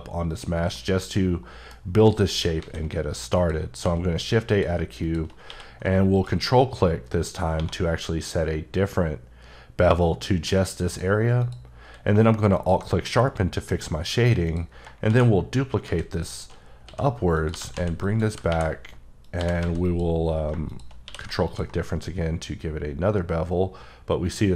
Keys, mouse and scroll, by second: 0.7 middle click, 2.3 shift+right click, 2.5 shift+a, 3.3 click, 3.8 s, 4.5 click, 5.4 q, 6.1 ctrl+click, 7.5 1, 10.8 click, 11.4 click, 11.8 q, 12.5 alt+click, 13.0 middle click, 13.1 scroll down 1, 13.7-14.4 scroll up 1, 14.4 click, 15.0-19.6 typing, 16.1 click, 17.3 click, 18.0 click, 19.2 click, 19.8 click, 21.0 q, 21.4 ctrl+click.